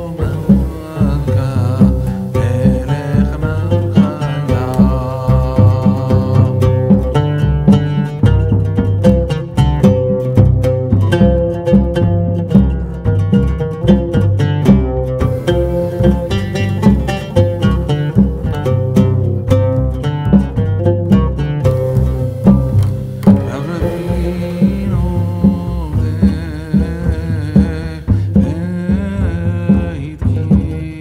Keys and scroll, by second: 3.2 ctrl+v.